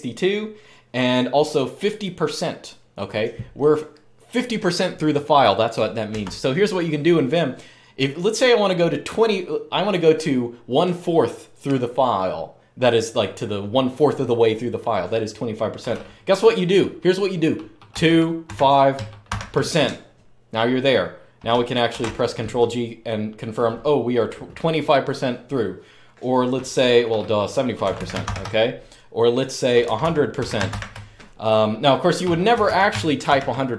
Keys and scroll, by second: 6.0 Escape, 17.7-19.0 typing, 21.7 ctrl+g, 27.6-28.0 typing, 29.6-30.4 typing, 32.3-33.0 typing.